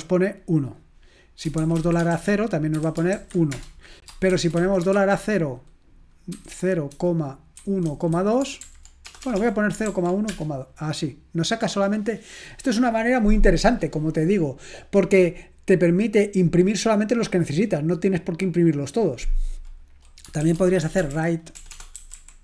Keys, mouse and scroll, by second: 1.9-5.4 typing, 7.8-10.2 typing, 20.7-22.4 typing.